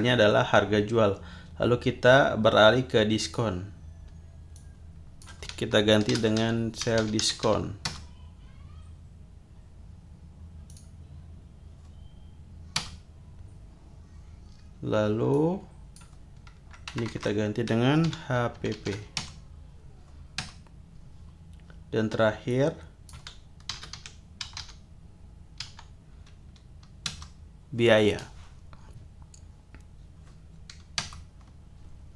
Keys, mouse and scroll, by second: 3.2 click, 4.5-5.4 drag, 5.9-7.9 typing, 10.7 click, 12.8 Return, 15.3 click, 17.0 BackSpace, 18.1 shift+h, 18.5 shift+p, 19.2 shift+Return, 20.4 Return, 22.5 click, 23.4-25.6 typing, 27.1 Return, 31.1 Return.